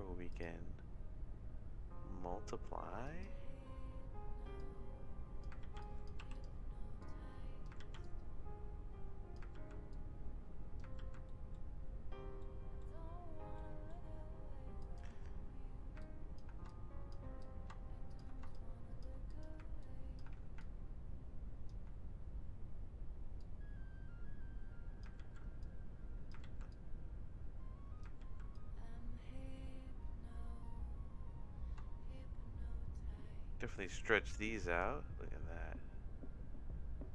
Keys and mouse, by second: 0.3-3.3 drag, 4.6 click, 5.6 ctrl+z, 5.8 click, 7.0 click, 7.9 ctrl+z, 8.0-9.3 drag, 9.6 ctrl+z, 9.9 click, 11.2 ctrl+z, 11.2 middle click, 12.4 middle click, 13.5 middle click, 14.8 click, 16.0 ctrl+click, 16.7 shift+click, 17.4 click, 18.5 shift+click, 19.3 click, 19.8 ctrl+click, 20.6-21.9 alt+drag, 23.4-25.0 drag, 25.3 ctrl+z, 25.6 click, 26.5 ctrl+z, 26.7-28.0 drag, 28.3 ctrl+z, 28.5-37.1 drag.